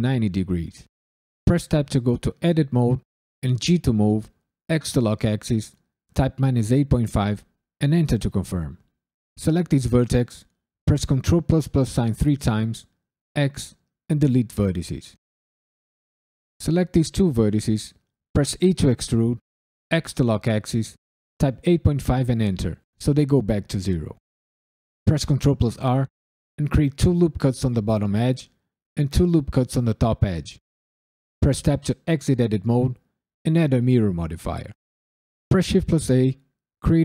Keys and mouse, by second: 1.4 Tab, 3.6 g, 4.6 x, 6.1 KP_Subtract, 6.5 KP_8, 6.9 KP_Decimal, 7.2 KP_5, 7.8 KP_Enter, 9.2 click, 11.4 ctrl+KP_Add, 11.8 ctrl+KP_Add, 12.1 ctrl+KP_Add, 13.3 x, 15.7 drag, 18.6 e, 19.9 x, 21.4 KP_8, 21.6 KP_Decimal, 21.9 KP_5, 22.3 KP_Enter, 25.0 ctrl+r, 26.6 2, 27.0 click, 28.3 ctrl+r, 28.7 2, 29.1 click, 31.4 Tab, 32.3-33.8 drag, 35.5 shift+a.